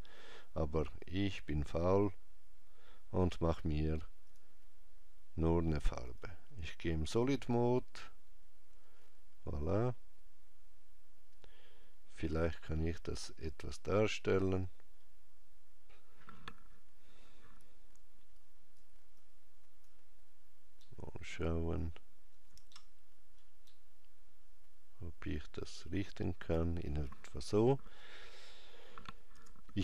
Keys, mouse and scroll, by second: 4.3 click, 12.6 middle click, 15.2 scroll down 1, 18.4 shift+right click, 19.2 shift+click, 20.8 shift+middle click, 22.7 ctrl+middle click, 23.7 ctrl+middle click, 29.4 Tab.